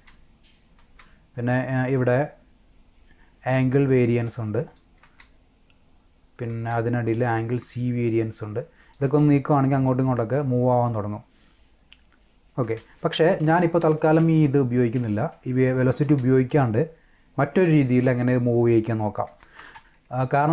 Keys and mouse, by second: 0.7 space, 4.2-4.7 drag, 5.0 space, 6.5 space, 7.8-8.9 drag, 9.0 space, 12.6 space, 13.4 ctrl+z, 13.8 ctrl+z, 14.2 ctrl+z, 15.0 ctrl+z, 16.0 space.